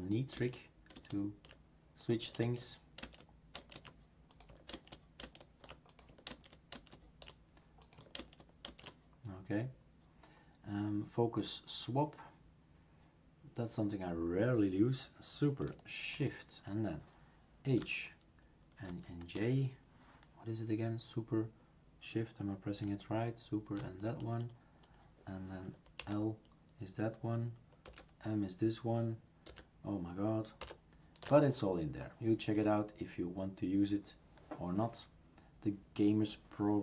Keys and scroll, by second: 2.4 alt+space, 8.2 alt+space, 17.8 shift+super+h, 18.9 shift+super+j, 26.0 shift+super+l, 27.8 shift+super+k, 29.5 shift+super+j, 30.6 shift+super+m.